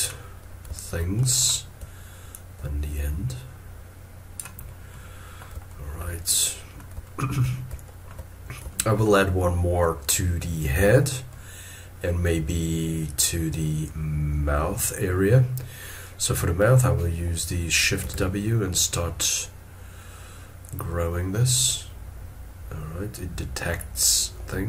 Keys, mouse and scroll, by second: 0.8 shift+middle click, 2.3 ctrl+click, 5.5 typing, 6.3 middle click, 7.0 shift+middle click, 7.8 shift+middle click, 8.7 shift+middle click, 11.3 middle click, 18.0 shift+w.